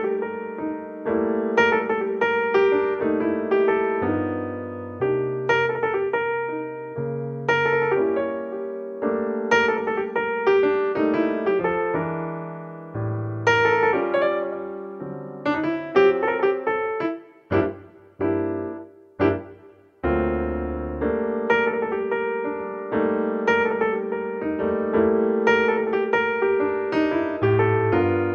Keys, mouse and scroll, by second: 5.1 KP_7, 8.0-9.8 drag, 9.8-11.9 middle drag, 10.6-12.3 drag, 12.3-12.9 middle drag, 12.9 r, 14.5 alt+r, 16.7 KP_1, 21.2 r, 23.2 KP_7, 24.4 r, 25.9-26.9 middle drag, 27.7-28.3 drag.